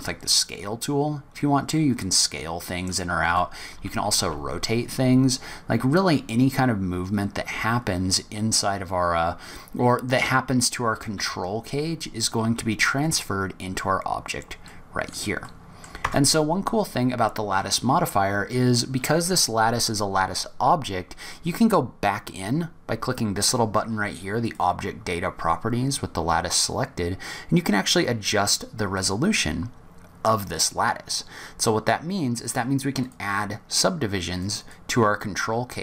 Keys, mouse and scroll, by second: 3.7 r, 14.1-14.7 scroll down 4, 14.7 middle click, 15.4 middle click, 16.0 Tab, 24.4 click, 26.1-27.4 scroll up 5, 32.4 click, 33.0 click, 34.3 click, 34.6 click.